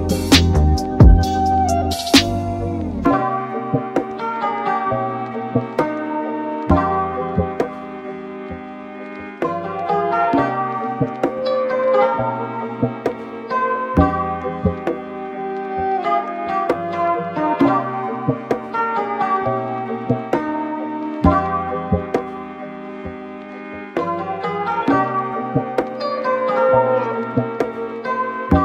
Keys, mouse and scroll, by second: 0.0-6.5 middle drag, 6.5 drag, 21.0 click, 23.5-24.0 scroll up 3, 24.1-24.6 scroll down 4, 25.0 scroll up 1, 27.1 click, 27.9-28.6 middle drag.